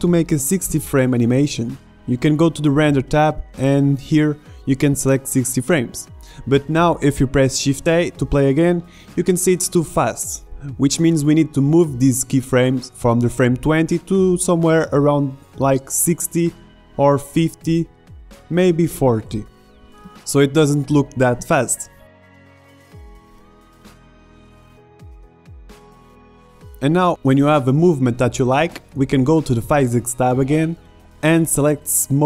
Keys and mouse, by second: 1.8 middle click, 2.9-4.9 drag, 10.6 alt+a, 11.5 alt+a, 12.3 alt+a, 12.7 shift+Left, 13.6 alt+a, 15.6 a, 15.8 b, 17.1 g, 19.7 alt+a, 21.2 alt+a, 21.5-23.5 drag, 22.4 g, 23.8 click, 24.3 alt+a, 25.6 alt+a.